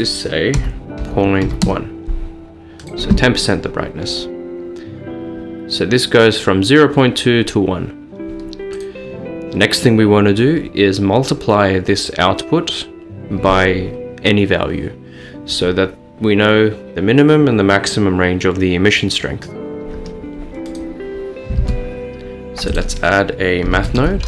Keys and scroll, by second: 0.4-1.5 typing, 1.7 Return, 21.6 a, 23.7-24.2 typing.